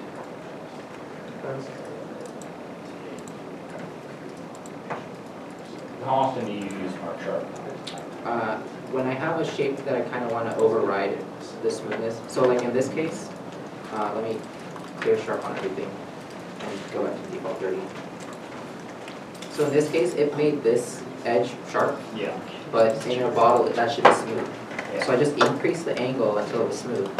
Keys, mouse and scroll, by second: 0.5 Tab, 1.3 Tab, 4.4 right click, 5.8 Tab, 6.1 scroll, 6.2-6.8 scroll down 1, 6.8 middle click, 9.3 Tab, 10.1 scroll up 1, 12.3 Tab, 13.0 Tab, 13.7 shift+middle click, 14.0 a, 15.5 Tab, 17.0 3, 17.2 9, 17.2 Return, 18.5 3, 18.7 BackSpace, 19.1 Return, 19.8 middle click, 22.8 scroll down 1, 24.9-26.2 scroll down 1.